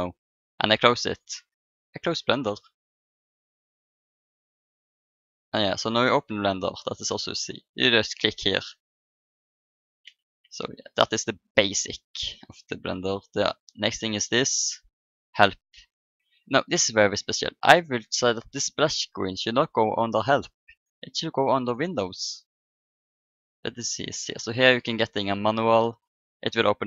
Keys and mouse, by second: 12.7 n, 14.0-15.7 drag, 15.7 middle click, 16.7-18.6 drag.